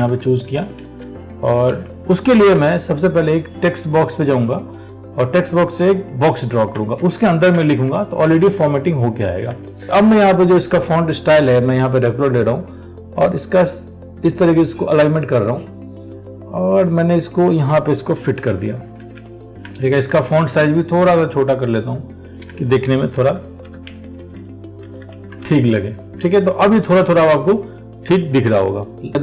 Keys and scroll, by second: 0.3 alt+Tab, 1.2 ctrl+v, 7.2 ctrl+v, 7.9 ctrl+a, 20.3 ctrl+t.